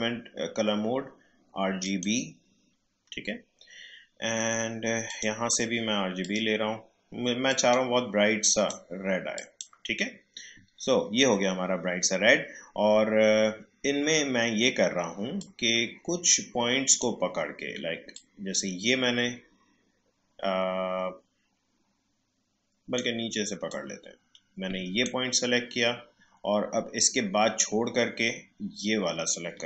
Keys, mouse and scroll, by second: 1.8 click, 5.0 click, 15.4-27.6 drag.